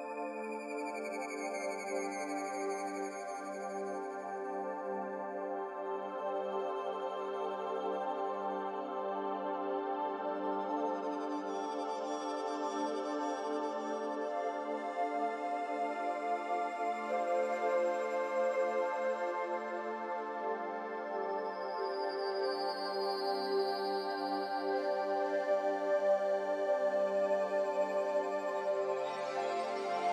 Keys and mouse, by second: 2.4-6.2 drag, 15.1-16.9 middle drag, 17.3 Tab, 18.6 click, 20.3 ctrl+e, 22.3 ctrl+r, 27.8 ctrl+r, 29.9 3.